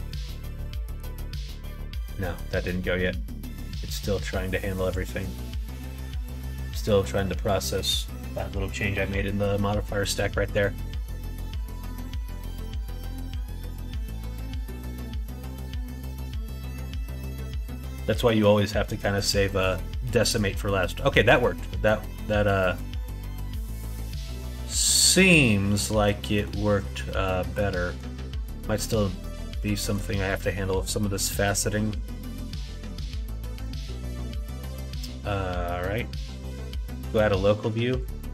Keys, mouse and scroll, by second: 22.1 middle click, 25.5 middle click, 26.9 middle click, 28.5 middle click, 29.2 middle click, 30.0 middle click, 30.5 middle click, 32.1 middle click, 33.5 middle click, 34.3 middle click, 36.6 middle click, 37.4 middle click, 37.8 click.